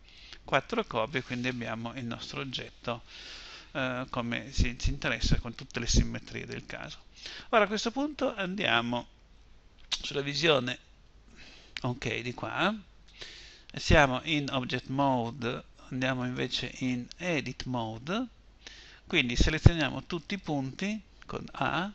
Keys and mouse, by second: 9.0 KP_1, 16.9 Tab, 19.7 a.